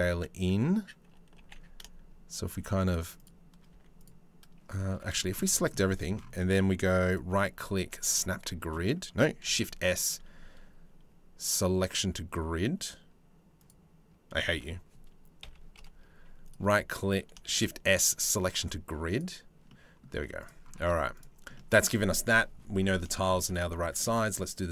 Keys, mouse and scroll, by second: 1.0 g, 3.3 z, 4.5 a, 4.8 shift+right click, 5.3 middle click, 6.7-8.3 drag, 9.0 shift+s, 14.1 ctrl+z, 15.0 KP_3, 15.3 KP_1, 16.1 right click, 17.1 shift+s, 19.3 click, 19.7 z, 20.4 Tab, 20.8 click, 21.1 middle click, 22.7 shift+middle click, 23.1 click, 23.7 a.